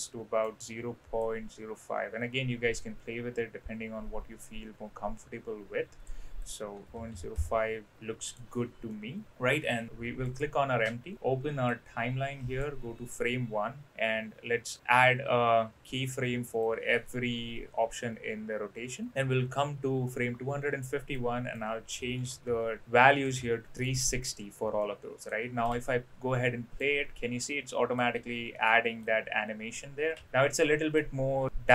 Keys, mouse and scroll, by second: 0.0-0.4 middle drag, 1.2-6.0 drag, 6.4-7.6 drag, 7.9-8.3 middle drag, 8.9-9.5 middle drag, 10.3 click, 11.7 click, 16.6-19.1 drag, 21.2-23.4 drag, 23.8-24.3 drag, 24.8 middle click, 25.7 space, 26.3-26.8 middle drag, 27.4-27.9 middle drag, 28.5-29.0 middle drag, 30.1 space, 30.2-30.9 middle drag, 31.5 middle click.